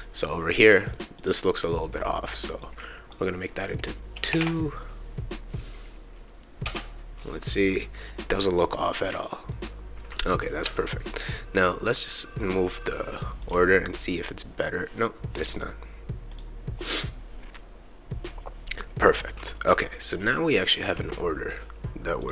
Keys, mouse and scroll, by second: 1.1 click, 2.6-4.3 drag, 4.3 BackSpace, 7.6-10.1 right drag, 9.1 a, 11.9 click, 13.4 click, 16.3 click, 19.1-21.5 right drag, 20.5 w, 22.2 click.